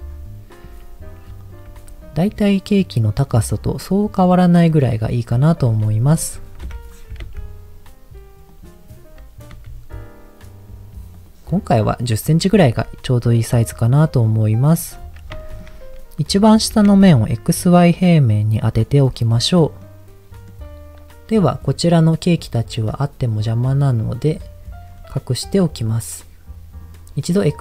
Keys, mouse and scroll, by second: 0.1-0.6 scroll up 1, 0.6 s, 1.4 click, 1.7 g, 3.2 click, 3.8 middle click, 5.3 middle click, 5.7 s, 6.0 click, 6.6 KP_1, 7.1 g, 7.2 z, 8.5 click, 9.5 s, 11.2 click, 12.6 g, 12.7 z, 14.7 click, 14.9-15.2 scroll up 2, 15.4 shift+middle click, 15.7-16.1 scroll up 2, 16.7 g, 16.8 z, 18.7 click, 19.1-19.8 scroll down 2, 19.8 middle click, 19.8-20.3 scroll down 1, 24.2 click, 24.9-25.2 scroll down 2, 25.6 click.